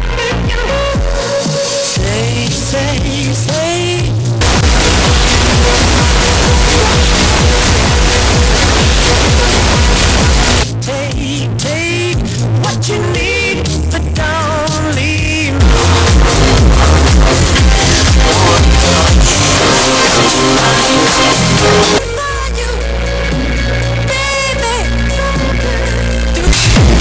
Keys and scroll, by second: 10.6 Page_Down, 22.0 Page_Down.